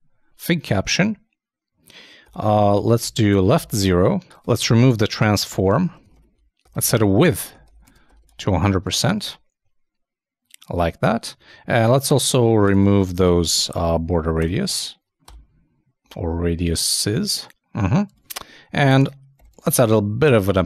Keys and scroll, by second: 2.4-3.3 typing, 7.3-9.0 typing, 9.2 super+Tab, 11.4 super+Tab, 17.4 super+Tab, 18.1 super+Tab, 18.9 super+Return.